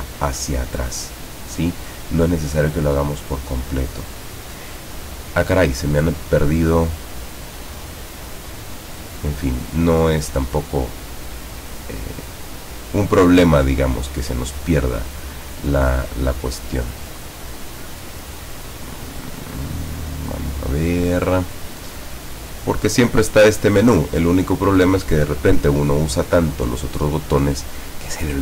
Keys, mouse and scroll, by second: 3.2 click, 3.8 click, 8.4 click.